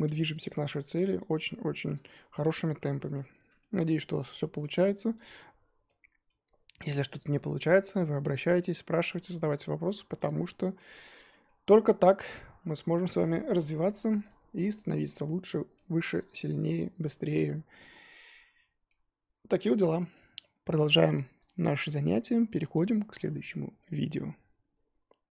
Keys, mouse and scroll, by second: 0.0 middle drag, 0.3 click, 0.4-1.2 middle drag, 1.2 click, 1.8-2.4 middle drag, 2.4 click, 2.8-4.6 shift+middle drag, 4.6-5.2 scroll up 3, 5.2 click, 5.3 Tab, 5.8 middle click, 6.4-6.7 scroll up 1, 6.7-7.3 middle drag, 7.3 Tab, 7.6 middle drag, 7.9 Tab, 8.7-9.8 middle drag, 9.8 Tab, 10.2 click, 10.3-10.7 scroll down 1, 10.7-12.3 middle drag, 12.3 click, 13.4 click, 15.7-18.8 middle drag, 19.0-22.0 scroll down 1.